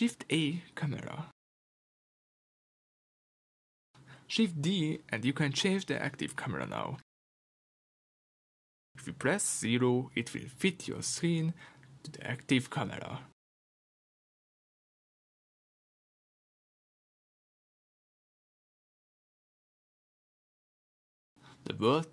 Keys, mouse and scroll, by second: 3.9 g, 4.5 click, 5.1 shift+d, 6.1 click, 8.2-12.3 drag, 13.7 KP_0, 15.2 g, 16.4 click, 16.9 r, 19.4 click, 20.0-22.1 middle drag, 20.7 scroll down 1.